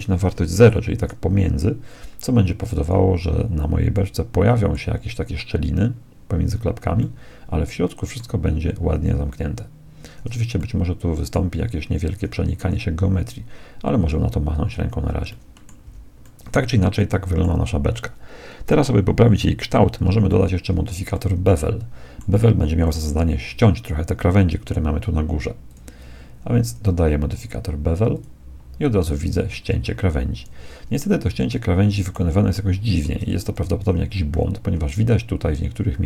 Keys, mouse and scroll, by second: 0.1 click, 3.9-5.7 middle drag, 7.0-8.9 middle drag, 10.0-12.4 middle drag, 12.2 z, 12.6-17.9 middle drag, 15.9 z, 20.3-24.5 middle drag, 25.7-28.4 drag, 29.6-36.0 middle drag.